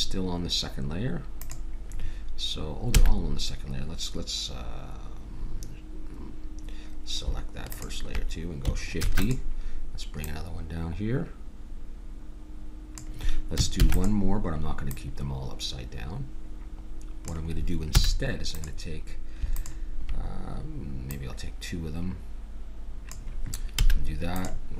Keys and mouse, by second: 1.3 middle click, 1.4-3.2 drag, 2.9 a, 7.7-9.3 drag, 8.9 shift+d, 9.4 click, 10.3-12.0 drag, 13.8 shift+d, 14.9-16.7 drag, 18.0 a, 18.7-22.8 drag, 23.8 a, 24.5-24.7 drag.